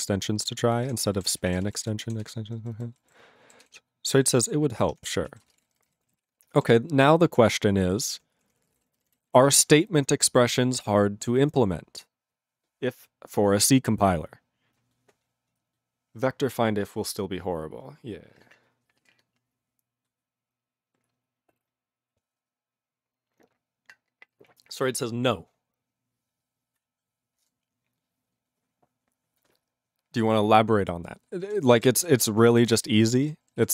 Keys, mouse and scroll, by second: 0.9 ctrl+/, 1.4 ctrl+s, 1.5 ctrl+a, 1.6 ctrl+space, 1.6 ctrl+e, 1.8 ctrl+g, 2.2 ctrl+s, 2.5 ctrl+n, 2.6 ctrl+n, 2.7 ctrl+n, 3.1 ctrl+=, 3.6 ctrl+s, 4.3 ctrl+=, 4.9 ctrl+-, 5.3 ctrl+a, 5.4 ctrl+space, 5.7 ctrl+n, 5.8 ctrl+n, 5.9 ctrl+g, 6.2 ctrl+s, 7.6 ctrl+s, 8.4 ctrl+space, 8.5 ctrl+p, 8.6 ctrl+p, 8.7 ctrl+g, 8.8 ctrl+e, 9.0 ctrl+n, 9.1 ctrl+n, 9.5 ctrl+s, 31.5 ctrl+a, 31.6 ctrl+space, 31.7 ctrl+e, 31.7 ctrl+g, 32.2 ctrl+s, 32.4 ctrl+n, 32.5 ctrl+n, 32.7 ctrl+space, 33.2 ctrl+alt+b, 33.3 ctrl+g, 33.6 ctrl+s.